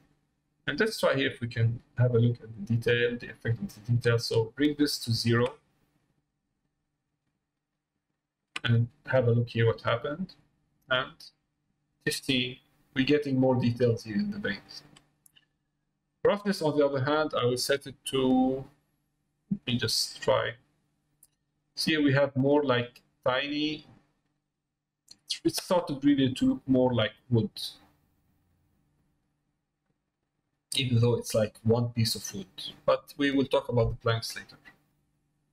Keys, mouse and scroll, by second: 0.9 middle click, 2.5-4.7 drag, 10.5-11.9 drag, 18.7-24.3 drag, 26.0 middle click, 28.2 middle click, 29.9 middle click, 30.8 middle click, 32.1 middle click, 33.0 middle click, 34.2 middle click.